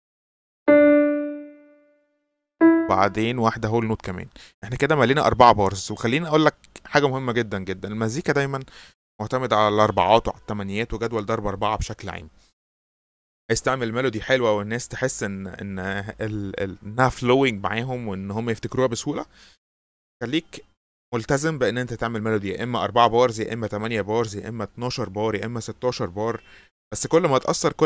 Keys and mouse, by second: 0.5 click, 1.4 click, 2.5 click, 3.5 click, 5.3-5.8 drag, 7.1 click.